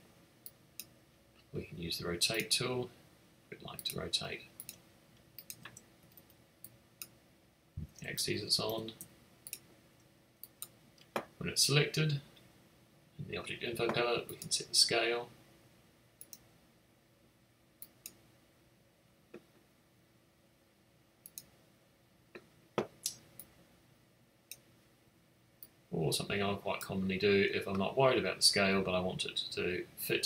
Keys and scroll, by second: 6.0 typing, 8.3 super+z.